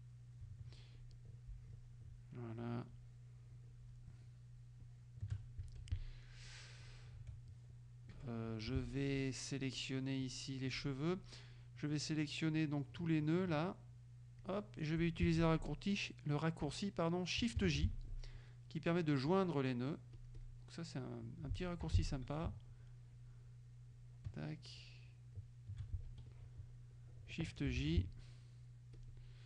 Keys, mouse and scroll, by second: 1.0 shift+click, 3.0-4.2 shift+drag, 4.9 shift+click, 5.7 shift+F2, 5.9 shift+click, 6.9 click, 8.2 F1, 8.5 click, 8.9 F2, 10.3 click, 12.6-14.7 drag, 17.7 shift+j, 20.2 click, 21.9 F6, 22.9 shift+click, 24.0 shift+click, 24.9 shift+click, 26.2 shift+F2, 26.3 shift+click, 27.8 shift+j, 28.4 shift+middle click.